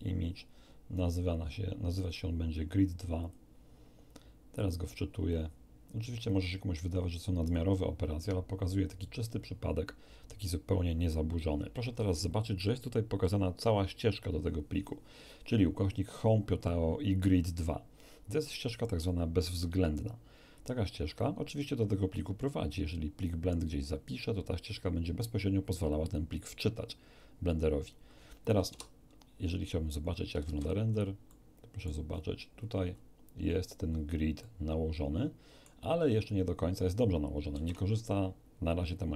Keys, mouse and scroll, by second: 3.2 click, 4.6 click, 6.2 click, 7.4 click, 8.9 click, 28.6 Tab, 30.4 shift+z, 31.2-32.0 shift+middle drag, 32.0-33.2 scroll up 3, 33.8-34.2 scroll up 1, 34.4-35.8 middle drag, 37.5 shift+z.